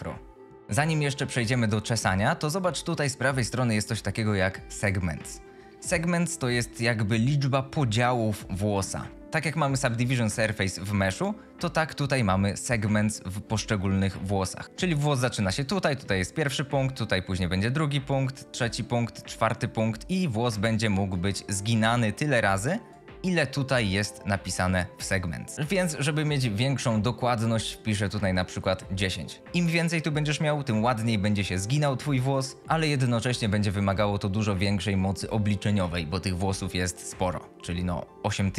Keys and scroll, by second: 14.4-15.3 typing, 27.9 KP_1, 28.3 KP_0, 28.6 Return.